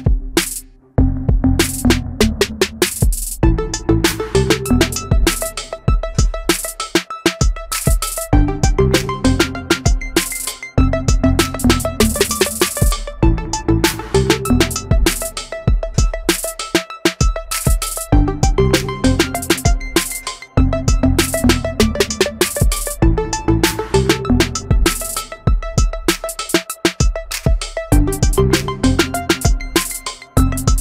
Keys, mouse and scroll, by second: 20.3 Delete, 22.1 ctrl+z.